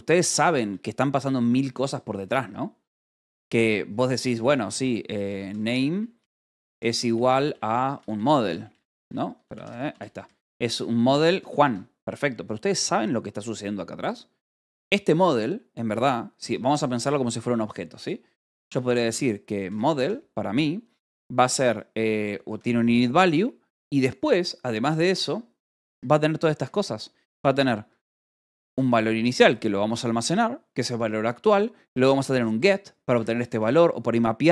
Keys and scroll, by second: 1.9-10.5 typing, 11.5 Escape, 14.7 o, 15.0 Return, 17.7-20.1 typing, 23.0 ctrl+g, 25.6 ctrl+g, 25.7 Escape, 25.9 k, 28.0 Escape, 28.3 j, 29.1 shift+v, 31.2 Escape, 31.7-34.0 typing, 32.9 Escape.